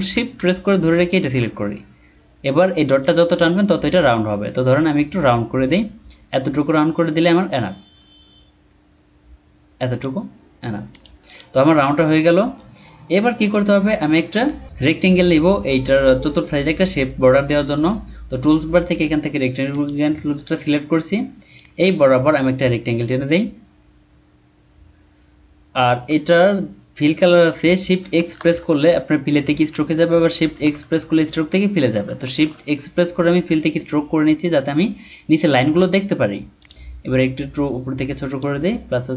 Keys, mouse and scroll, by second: 1.1 shift+click, 11.2 double click, 12.1 alt+scroll down 1, 14.4 ctrl+scroll down 1, 18.9 right click, 28.5 x, 30.6 x, 32.3 x, 35.8 typing.